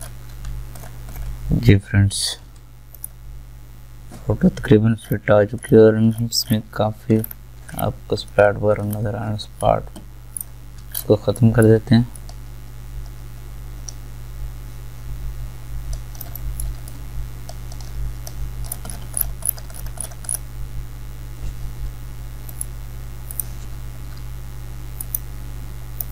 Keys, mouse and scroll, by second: 0.8 alt+scroll down 1, 2.4 v, 5.0 alt+scroll up 1, 5.6 scroll down 1, 6.1 alt+scroll up 1, 6.6 alt+scroll down 1, 7.1-7.7 alt+scroll up 1, 10.4 alt+click, 11.0 alt+scroll up 1, 11.4 alt+right click, 12.2-16.4 drag, 16.4 alt+right click, 16.9 click, 16.9-18.9 drag, 18.9 scroll down 1, 22.4 scroll, 22.5 right click, 23.3 click.